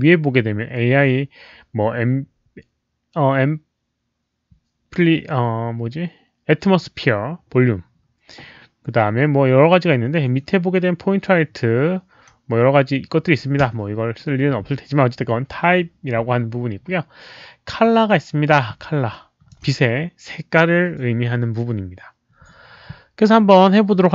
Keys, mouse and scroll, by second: 9.8 middle click, 13.7 Escape, 18.4 Escape, 19.1 alt+click.